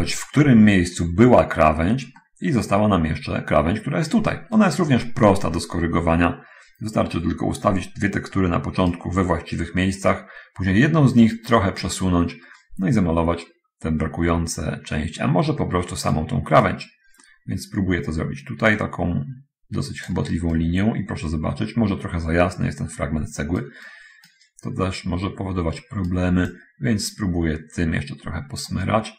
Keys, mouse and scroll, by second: 2.4 middle click, 3.8 middle click, 4.5-9.0 right drag, 9.0-10.3 scroll down 1, 10.3 scroll up 1, 11.6-16.5 right drag, 16.5-20.5 drag, 20.8-24.7 right drag, 24.7-26.5 scroll down 1, 26.5 scroll down 1, 26.8-28.9 drag.